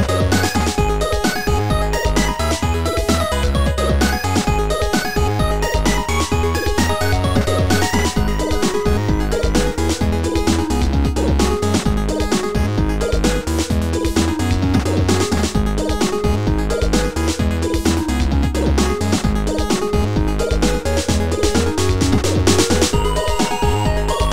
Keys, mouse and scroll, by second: 0.0 right click, 0.0 shift+click, 2.2 click, 5.7 click, 6.1 click, 6.1 right click, 7.4 right click, 8.5 right click, 8.5 click, 11.0 click, 12.5 right click, 13.8 click, 14.0 click, 16.7 click, 17.9 click, 20.0 click, 23.7 click.